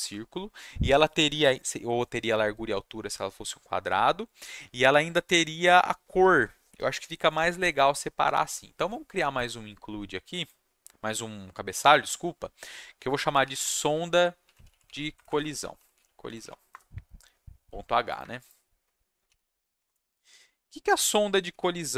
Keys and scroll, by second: 13.0-16.7 typing, 18.2 F2, 19.3-20.2 typing, 21.5-21.9 typing.